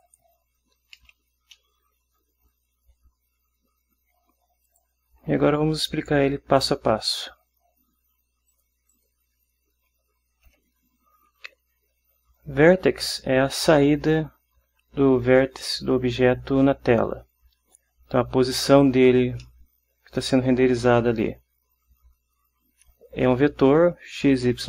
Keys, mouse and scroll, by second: 0.2 click, 0.5-4.8 scroll up 1, 4.8 click, 8.6 click, 9.0 click, 10.6 Home, 12.2 Down, 19.6-20.6 drag.